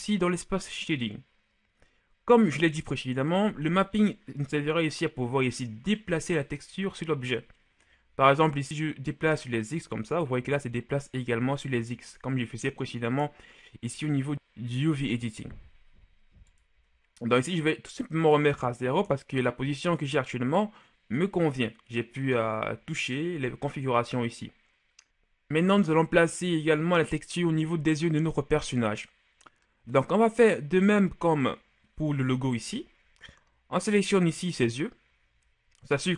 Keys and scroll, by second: 18.7 KP_0, 19.0 Return, 35.9 g.